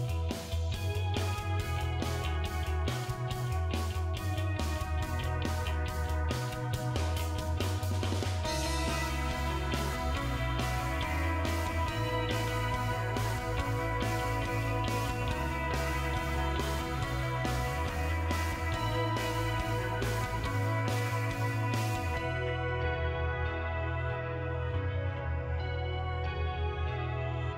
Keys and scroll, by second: 7.0-10.8 typing, 12.3-13.5 typing, 15.6-19.2 typing, 20.4-24.9 typing, 26.6-27.2 typing.